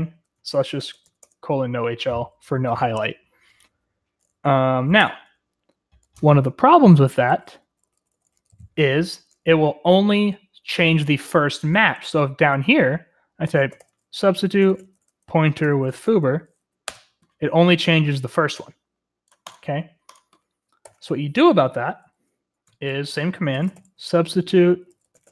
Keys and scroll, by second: 0.5-1.5 typing, 5.0 typing, 6.9-9.4 typing, 13.4-16.0 typing, 16.8 Return, 20.8 u, 23.3-25.3 typing.